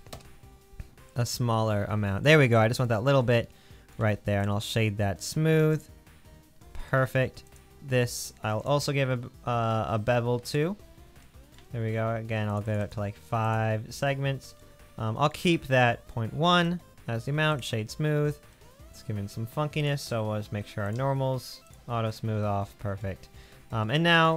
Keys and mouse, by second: 1.8 middle click, 2.1 middle click, 2.9 middle click, 3.8 middle click, 4.0 Tab, 7.6-8.6 drag, 19.9-20.9 drag, 22.1-22.7 middle drag, 23.5-24.3 middle drag.